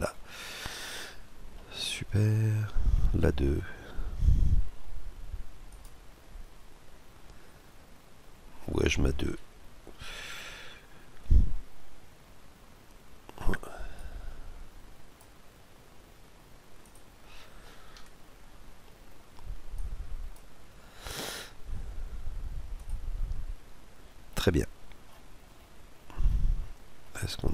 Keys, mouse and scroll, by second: 2.7-4.4 middle drag, 4.4-5.4 scroll up 1, 5.4-15.4 right drag, 5.4 scroll up 1, 13.6 middle click, 19.4-20.8 middle drag, 19.4-21.2 right drag, 19.4 KP_Decimal, 24.9-27.5 middle drag.